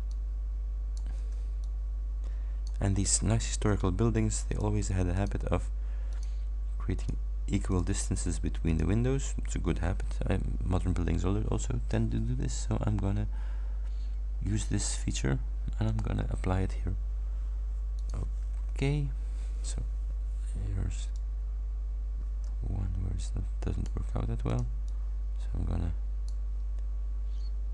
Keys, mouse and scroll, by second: 0.1 ctrl+click, 1.3 ctrl+d, 1.7-2.9 ctrl+drag, 3.4 ctrl+scroll down 2, 4.5 shift+click, 5.2 shift+click, 6.1 shift+click, 7.0 shift+click, 7.7 shift+click, 8.7 shift+click, 15.9 click, 18.1 click, 18.6-19.1 scroll up 2, 21.2-24.1 drag, 24.5-26.5 ctrl+drag.